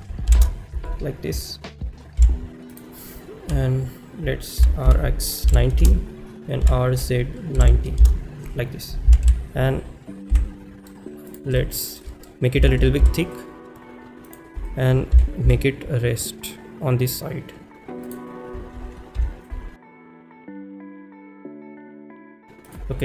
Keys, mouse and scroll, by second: 5.8 Return, 5.8 0, 11.3 click, 11.3 y, 11.3 x, 11.6-12.0 shift+middle drag, 13.3 s, 14.3 click, 18.1 click, 20.0 shift+middle drag, 20.0-22.2 typing, 21.1 click, 21.5 shift+middle click, 21.7 shift+middle click.